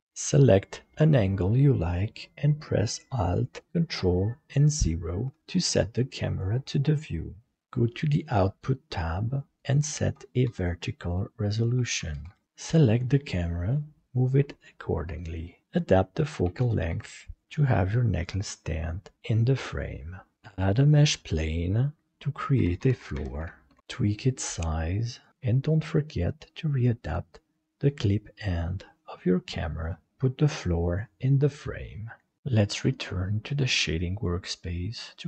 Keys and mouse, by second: 0.0 middle click, 0.3 shift+middle click, 4.8 ctrl+alt+KP_0, 9.6-11.0 drag, 11.4-12.4 drag, 14.0 g, 14.6 g, 16.1 click, 17.4 g, 20.3-21.4 drag, 22.1 F2, 23.1 shift+o, 23.8-24.9 drag, 29.5 click.